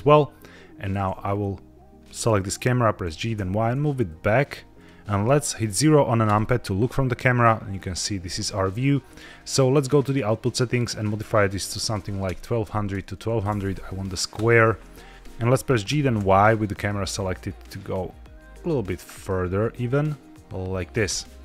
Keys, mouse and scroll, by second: 0.7 click, 1.1-1.5 scroll down 3, 1.9 middle click, 2.9 g, 3.2 y, 4.6 click, 6.2 KP_0, 7.7-8.4 scroll down 1, 9.8 click, 10.8-14.3 drag, 13.5 KP_0, 15.1 Escape, 15.1 g, 15.1 y, 15.8 g, 16.1 y.